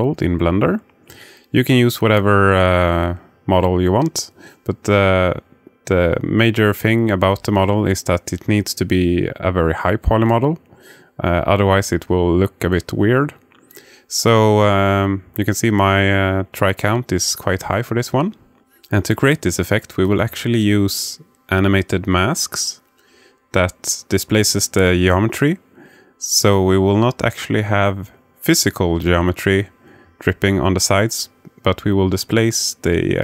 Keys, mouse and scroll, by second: 7.6 click, 8.3-8.9 alt+middle drag, 11.6-14.7 alt+middle drag, 16.2-17.4 alt+middle drag, 18.7 click, 19.4-21.2 alt+middle drag, 27.7-29.5 alt+middle drag.